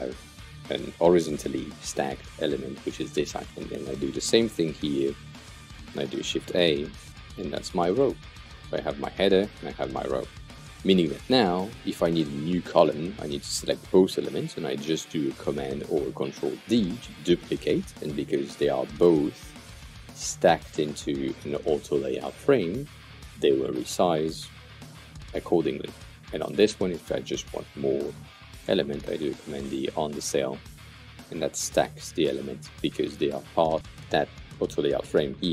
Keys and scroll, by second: 6.3-8.0 typing, 16.5 super+d, 23.1 super+d, 28.5 super+d.